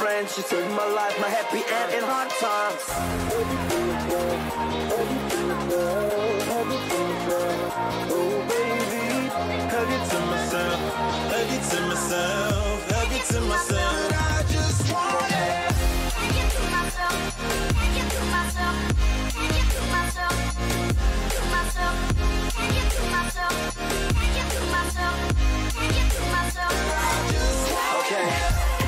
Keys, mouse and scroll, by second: 24.0-26.8 middle drag, 26.9 a, 27.3 a, 28.3 middle click.